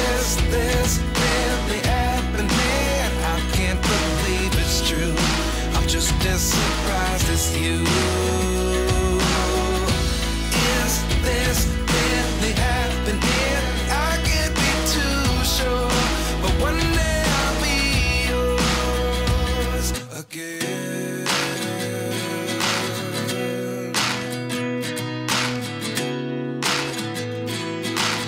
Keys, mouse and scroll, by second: 4.4 Tab, 6.4-7.7 drag, 8.3-9.9 drag, 10.6 click, 11.4 Tab, 11.9 ctrl+r, 13.5 click, 14.4 ctrl+r, 15.7 click, 16.6 click, 17.0 r, 17.2 click, 18.2 ctrl+r, 18.5 click, 18.8 click, 18.9 g, 21.1 click, 21.7 click, 21.9 g, 22.3 click, 22.7 ctrl+z, 22.9 click, 23.3 click, 23.6 g, 24.0 middle click, 24.4 click, 25.1 click, 26.0 Tab, 27.2 Tab, 27.6 click.